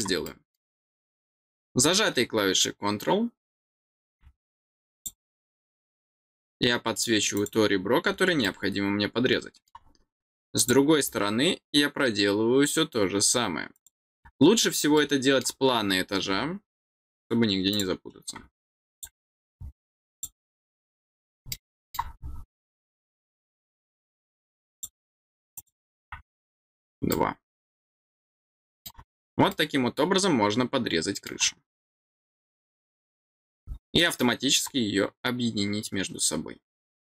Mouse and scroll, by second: 0.2 middle click, 4.9 click, 7.3 click, 8.4-9.6 middle drag, 10.5 click, 13.7 click, 14.1-14.5 scroll down 2, 14.9 middle click, 17.6 click, 18.9 click, 20.0 click, 21.5 middle click, 24.7 click, 25.5 click, 26.6 scroll down 2, 27.1-28.8 middle drag, 29.4-31.2 middle drag, 33.3-33.7 scroll down 2, 33.9 middle click.